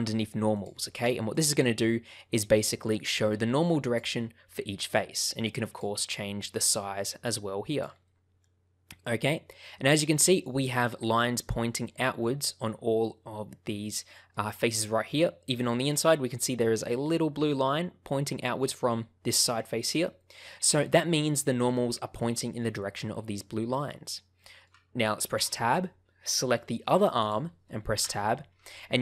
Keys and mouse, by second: 5.6-7.9 drag, 8.0-10.3 middle drag, 10.5 middle click, 10.9 middle click, 13.9 middle click, 14.8-15.8 middle drag, 16.5 shift+middle click, 20.1 middle click, 21.0 shift+middle click, 21.7 middle click, 23.4 middle click, 24.3 shift+middle click, 25.3 Tab, 27.2 click, 27.9 Tab, 28.6-29.0 middle drag.